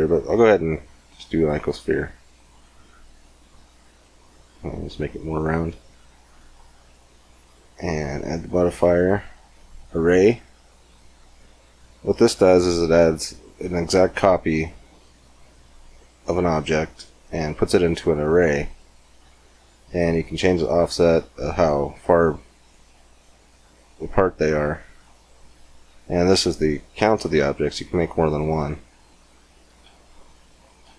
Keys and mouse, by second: 3.2-6.4 drag, 7.7-9.6 drag, 11.6-14.7 middle drag, 16.4-19.7 middle drag, 19.7-26.6 drag, 26.6 middle click, 27.6-30.6 drag, 29.9-30.9 middle drag.